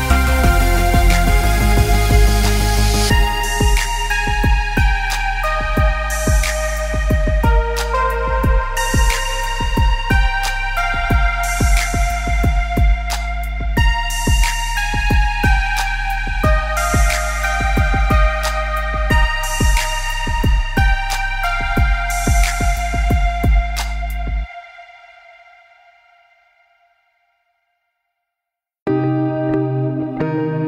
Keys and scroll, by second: 4.6 ctrl+-, 10.8 ctrl+=.